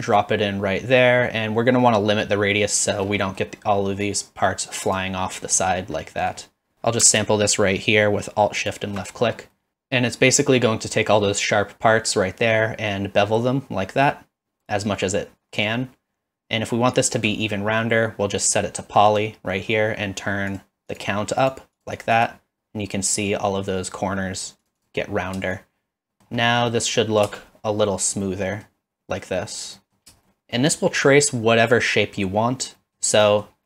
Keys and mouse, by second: 3.2 middle drag, 4.9 click, 5.3 middle drag, 6.0-6.3 middle drag, 8.6 alt+shift+click, 9.5 middle click, 9.7-17.2 shift+drag, 19.1 click, 20.9 click, 21.5 click, 21.8 click, 22.1 click, 24.7 click, 24.8 click, 25.7 shift+click, 26.2 middle click, 26.7 middle drag, 27.3 space, 28.2-28.6 middle drag, 29.8 middle click, 30.3 shift+middle click, 32.8 middle click, 33.3 middle click.